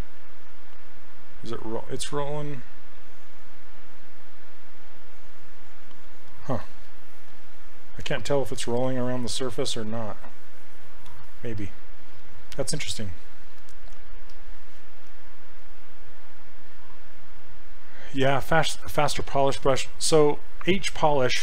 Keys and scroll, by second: 6.7 ctrl+z, 8.6 ctrl+z, 11.1 ctrl+z.